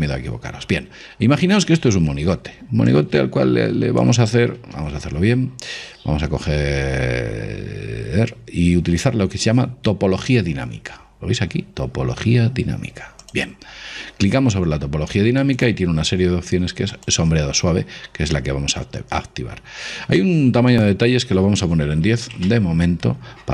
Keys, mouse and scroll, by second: 3.0 click, 4.7 ctrl+z, 13.3 click, 14.7-18.7 middle drag, 15.6-18.9 drag.